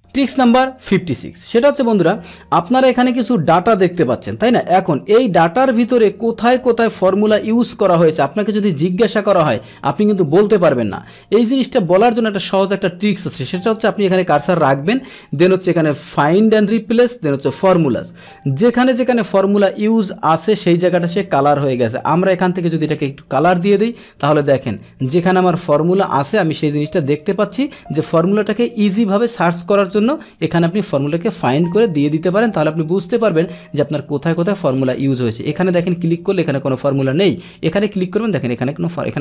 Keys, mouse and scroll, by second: 0.0 middle click, 0.0 click, 0.9 click, 1.8-3.2 drag, 3.5 ctrl+c, 5.8 click, 7.0 alt+h, 8.1-8.8 scroll down 1, 8.8 click, 8.9-9.5 scroll down 1, 9.5 scroll down 1, 9.7 scroll up 1, 10.3 click, 12.0 click, 13.0 click, 13.6 click, 15.3 click, 17.4 click, 21.5 click, 23.3 click, 24.4 click, 25.5 click, 25.9 click, 26.2 click, 26.6 click, 27.1 click, 28.2-29.2 scroll down 1, 29.2-29.7 scroll up 1, 29.7-32.0 scroll down 1, 32.8-34.3 drag, 34.7 click, 35.3 click, 35.7 click, 36.0 click, 37.7 click.